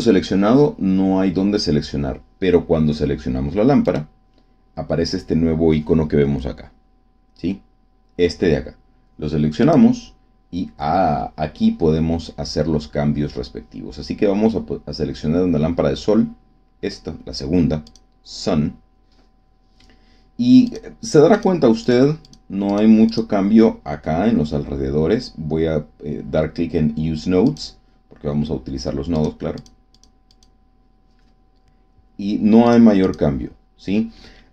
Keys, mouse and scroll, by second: 3.8 right click, 9.6 click, 17.8 click, 20.6 click, 21.2 click, 21.8 click, 22.2 click, 22.6 click, 23.0 click, 27.4 click, 29.1 click, 29.5 click, 30.0 click, 32.6 click, 33.0 click, 34.4 scroll down 1.